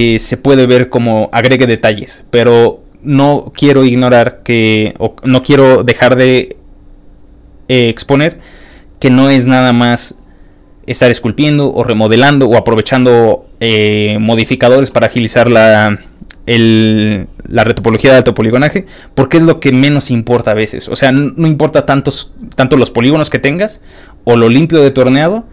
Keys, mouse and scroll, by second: 15.7 ctrl+click, 17.8 ctrl+click, 18.4 ctrl+click.